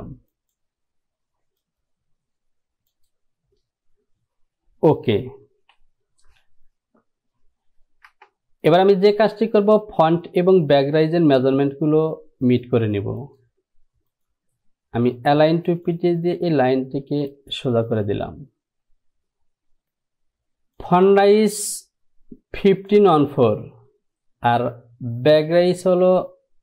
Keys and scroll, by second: 5.7 Home, 8.3 Return.